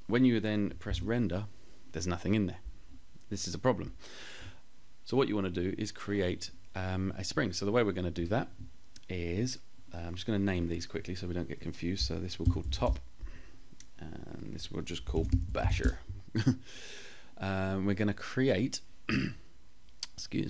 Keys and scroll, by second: 11.7 p, 12.0 Return, 13.2 Return, 14.2-15.2 typing.